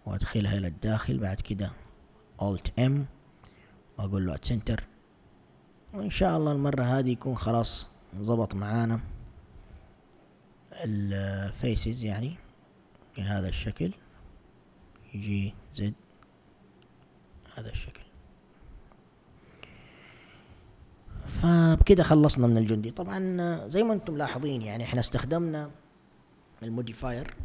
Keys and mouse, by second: 2.4 alt+m, 4.6 a, 5.9 Tab, 6.6 Tab, 8.1 click, 9.4 g, 14.2 click, 15.4 g, 17.4 a, 18.2 Tab, 20.8 1.